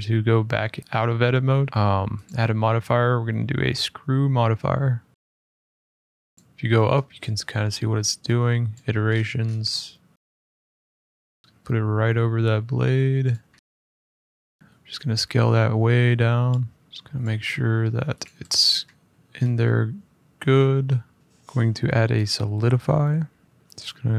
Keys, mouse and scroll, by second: 0.0 Tab, 0.5 middle click, 0.7 middle click, 0.8 middle click, 0.9 middle click, 1.3 middle click, 1.7 middle click, 2.0 click, 5.9 middle click, 6.3 click, 6.4 middle click, 6.5 middle click, 6.7 middle click, 8.5 click, 8.8 middle click, 8.8 middle click, 8.9-9.3 middle click, 9.2 middle click, 9.2 middle click, 9.9 middle click, 10.1 click, 10.1 middle click, 10.5 shift+middle click, 10.7 middle click, 11.3 middle click, 11.4 middle click, 13.0 click, 13.3 middle click, 13.3 middle click, 13.5 click, 13.6 s, 16.2 click, 16.9 middle click, 16.9 g, 17.0 click, 17.4 `, 17.9 `, 18.0 click, 18.6 middle click, 19.1 middle click, 19.2 middle click, 19.4 middle click, 20.1 middle click, 21.1 middle click, 22.2 click, 23.2 scroll up 2, 23.4-24.1 middle drag.